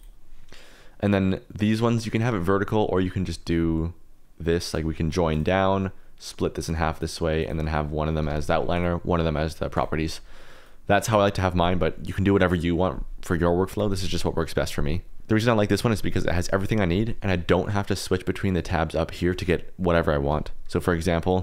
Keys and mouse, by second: 0.0 click, 1.6 click, 4.6 click, 6.6 click, 7.4 click, 8.7-9.8 drag, 10.6 click, 21.2 click.